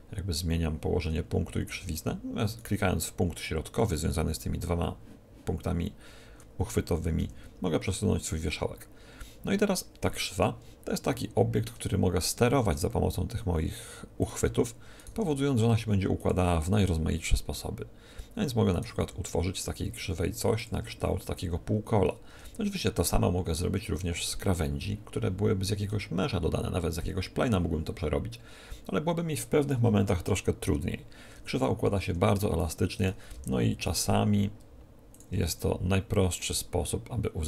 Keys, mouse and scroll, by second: 2.5-4.3 right drag, 7.1 g, 10.7-12.1 middle drag, 10.7-11.1 scroll down 2, 12.1-13.9 right drag, 12.6 g, 14.3-18.0 drag, 14.9-16.0 right drag, 15.1 g, 16.2 right click, 18.7-20.2 right drag, 18.9 r, 20.2 middle click, 20.7-22.3 drag, 22.3 Tab, 32.0 Tab, 32.9-34.9 right drag, 33.3 g, 35.3-37.1 drag, 35.5 Tab.